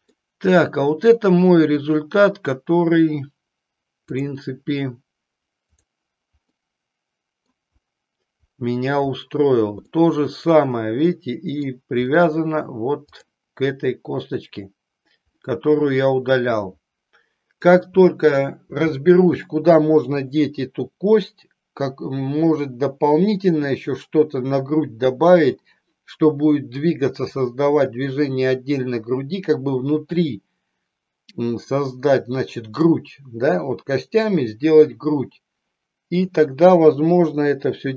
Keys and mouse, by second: 0.2-1.2 middle drag, 4.2 click, 6.7 middle click, 10.1-11.8 middle drag, 13.2 click, 15.4-17.8 middle drag, 36.9 KP_3.